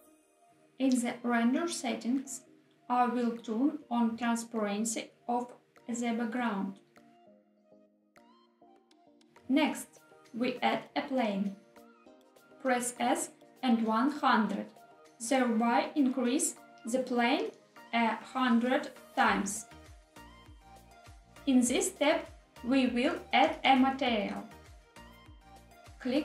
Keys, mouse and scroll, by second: 0.4 scroll down 2, 0.7 click, 3.8-5.5 scroll down 3, 5.5 click, 6.6-7.8 scroll down 4, 8.8 click, 9.6 shift+a, 15.4 s, 16.2 1, 17.3 0, 17.5 0, 20.7 click, 24.0 click.